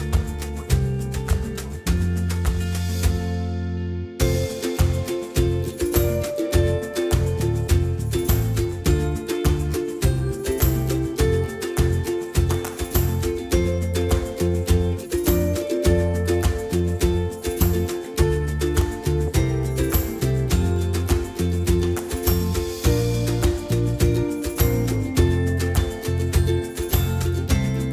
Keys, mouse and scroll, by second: 0.3-4.0 drag, 4.0-9.2 middle drag, 9.2 right click, 9.5-12.0 middle drag, 12.0 shift+g, 17.0-22.0 middle drag, 22.4-26.6 middle drag.